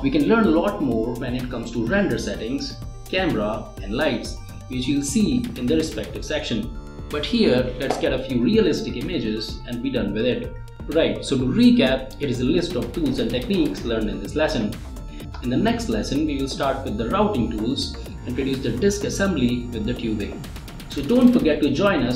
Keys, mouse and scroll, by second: 5.8 click, 7.5 click, 9.4 click, 9.5 typing.